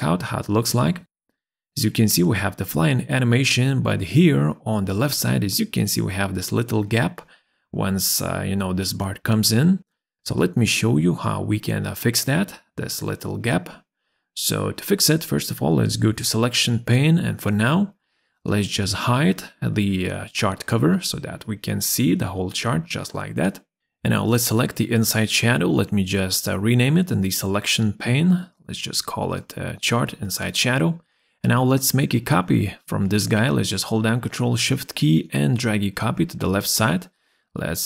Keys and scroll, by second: 27.4 ctrl+a, 27.6-28.7 typing, 28.8 Return, 32.4 ctrl+s.